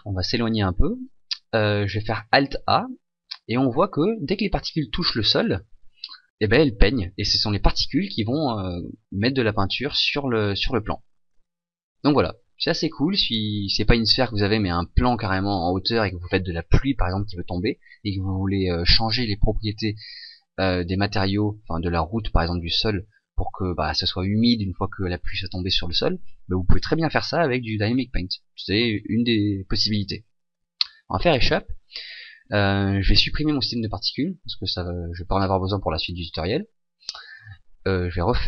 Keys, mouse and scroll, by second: 0.8 click, 2.7 alt+a, 5.3 g, 30.5 Escape, 32.5 click, 33.7 click, 35.8 click.